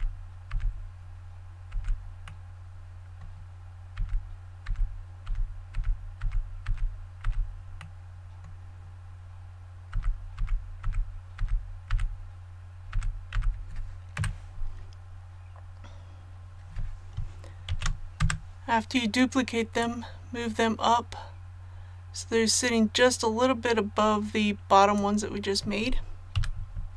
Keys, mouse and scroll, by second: 0.0-2.2 typing, 2.2-3.8 middle drag, 3.9 typing, 5.2-7.2 typing, 7.8-8.8 middle drag, 9.9-14.1 typing, 15.0 scroll down 1, 17.7 shift+d, 19.8-25.8 drag, 26.3 a.